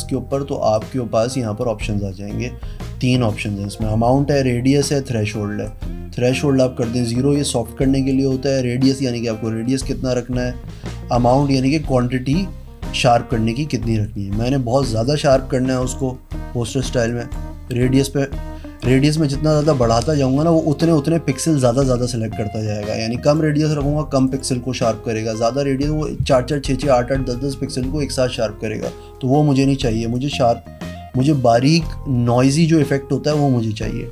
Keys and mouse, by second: 0.7 click, 5.6 click, 11.3 click, 15.7 click, 17.0 click, 18.7 click, 19.9 click, 23.2 click, 24.2 click, 30.1 click.